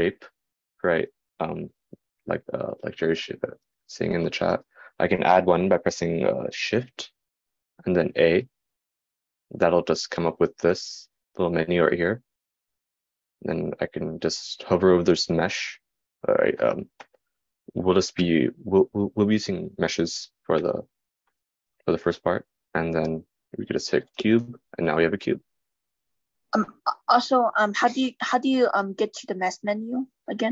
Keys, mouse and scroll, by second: 25.5-30.5 shift+middle drag, 25.5-30.5 shift+right drag, 27.9 shift+a.